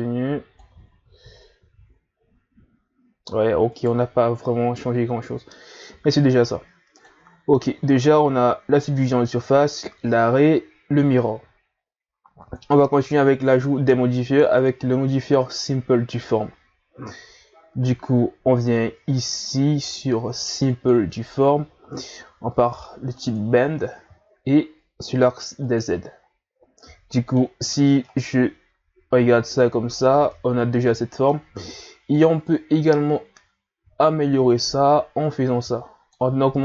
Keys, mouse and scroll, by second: 0.9 a, 1.2-1.6 scroll down 4, 1.6 a, 2.4-3.1 scroll down 1, 3.1-3.7 scroll down 1, 3.7 right click, 4.1-5.7 scroll down 2, 5.7 scroll up 1, 6.9-10.0 drag, 12.4-15.4 drag, 23.2 click, 25.6 click, 26.5 scroll down 1, 26.8-30.0 middle drag, 30.0-30.3 scroll up 2, 30.3-32.4 middle drag, 32.4-35.5 drag.